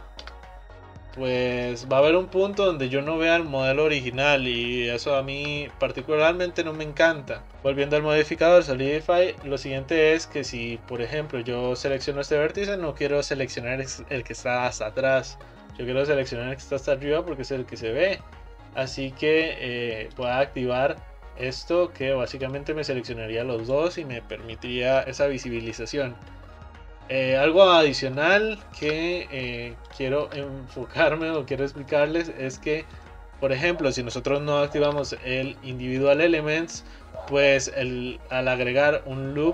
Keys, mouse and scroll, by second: 0.4 e, 1.2 e, 2.2-5.0 middle drag, 5.0 ctrl+z, 5.5 ctrl+z, 6.5-7.5 middle drag, 10.5-12.0 scroll up 1, 12.0 click, 20.3 click, 22.5 click, 23.0 click, 25.0-27.1 middle drag, 28.0 shift+click, 29.0 e, 30.4 e, 32.1-35.0 middle drag, 35.0 ctrl+r.